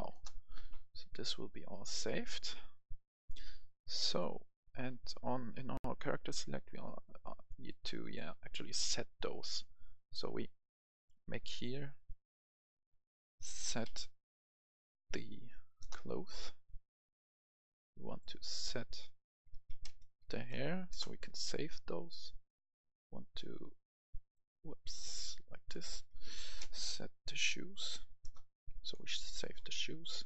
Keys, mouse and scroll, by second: 0.2 Return, 1.5 click, 3.3-6.0 right drag, 6.0 scroll up 1, 6.8-8.5 right drag, 10.1-13.0 drag, 13.4-13.8 typing, 15.3 Up, 15.5 Up, 15.8 Return, 16.7-20.0 drag, 19.3-20.6 typing, 20.9 Return, 21.7-25.0 drag, 25.8-27.9 typing, 28.2 Return, 28.9 right click, 29.6 click.